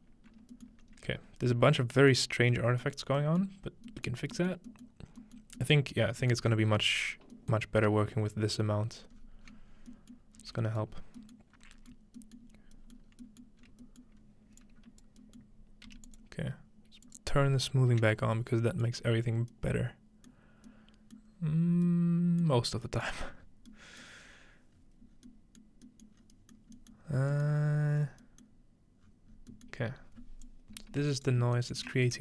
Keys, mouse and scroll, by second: 0.7 alt+middle click, 0.9-2.0 scroll up 1, 2.0 scroll up 1, 2.1-2.5 middle drag, 2.3-4.8 scroll down 3, 2.8 middle click, 3.5 middle click, 4.1 middle click, 4.5 middle click, 5.0 middle click, 5.5 middle click, 5.8 middle click, 6.5 middle click, 6.5-6.9 scroll up 1, 6.9-7.3 scroll down 1, 7.6-9.3 middle drag, 8.2-10.4 scroll down 4, 9.5 middle click, 10.2 middle click, 10.4 scroll up 2, 10.8 middle click, 11.4 middle click, 11.5 scroll up 4, 11.9 middle click, 12.6-13.1 scroll up 2, 13.1 scroll down 2, 13.6 scroll up 2, 14.2 scroll up 1, 14.6-15.9 drag, 15.9 g, 16.1 click, 16.3-18.1 scroll down 2, 17.1 click, 18.9-19.5 middle drag, 19.1-20.3 scroll up 2, 20.3-21.1 scroll up 1, 21.7 middle click, 21.7-22.4 scroll down 2, 22.4-24.3 scroll down 2, 22.5 middle drag, 24.3-24.9 scroll up 4, 25.1 middle click, 25.1 scroll down 2, 25.6 middle click, 26.2-29.0 scroll up 7, 26.6 middle click, 27.0 middle click, 27.5 middle click, 28.5 middle click, 29.0-29.8 scroll down 4, 29.8 scroll up 2, 30.4 click, 31.1 right drag, 31.4-31.8 scroll up 1.